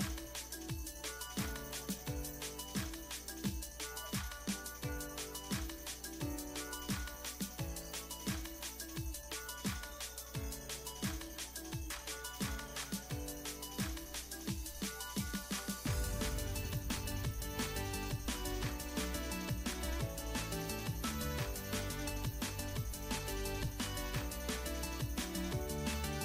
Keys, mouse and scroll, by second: 4.8 middle click, 5.0 scroll up 1, 5.7-8.9 right drag, 9.1-11.1 right drag, 11.7 scroll down 2, 12.3 middle click, 13.2-15.8 right drag, 17.6 click, 19.8 click, 20.3 click, 21.6 click, 22.8 click, 23.6 click, 25.1 click, 26.1-26.2 drag.